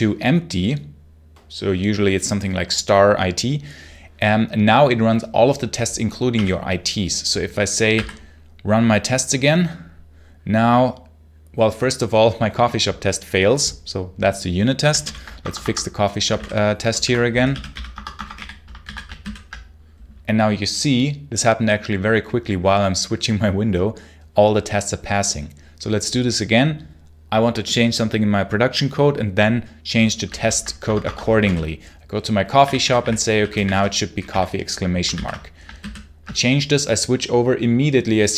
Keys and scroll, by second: 6.2 o, 7.8 r, 14.9 super+l, 15.3 Escape, 16.1-18.7 typing, 19.1 super+h, 30.3 super+l, 30.7 Escape, 31.1-34.6 typing, 35.0 ctrl+s, 35.6 super+h.